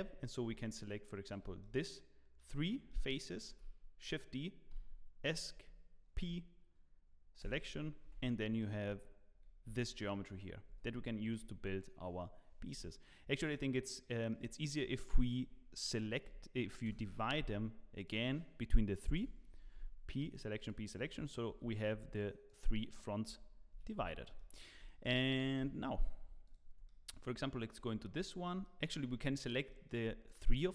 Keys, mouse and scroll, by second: 3.0 shift+click, 3.0 middle click, 3.5 shift+d, 8.0 Tab, 8.6 click, 9.7 g, 12.7 Tab, 13.3 click, 14.0 middle click, 16.2 p, 18.0 click, 19.1 p, 19.6 Tab, 20.2 click, 21.1 click, 21.5 click, 21.5 g, 22.1 click, 22.9 click, 23.2 g, 24.3 middle click, 24.8 shift+middle click, 25.6 KP_1, 26.2 scroll up 1, 26.4 click, 26.8 shift+middle click, 27.9-28.2 scroll up 1, 28.2 shift+middle click.